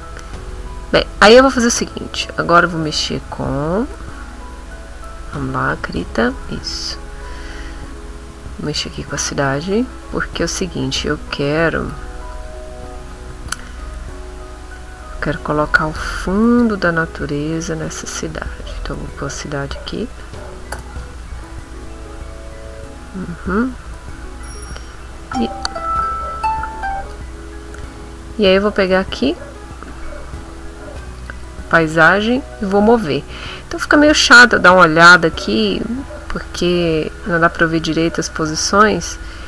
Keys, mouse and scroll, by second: 1.5 click, 2.4 click, 4.3 middle click, 5.7 b, 6.3 middle click, 6.9 middle click, 8.6 click, 9.4 click, 11.9 click, 12.3 click, 12.7 click, 13.5 click, 15.0 shift+click, 15.9 shift+click, 17.5 shift+click, 18.4-20.0 shift+drag, 20.7 Return, 23.2-24.6 middle drag, 28.8 click, 31.1 click, 31.7 click, 32.0 click, 32.7-38.8 drag.